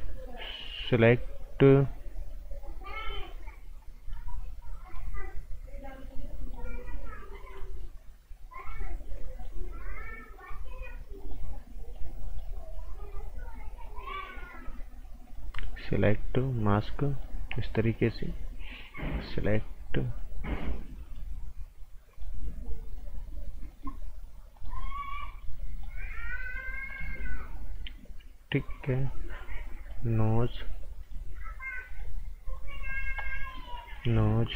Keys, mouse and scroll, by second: 2.9 click.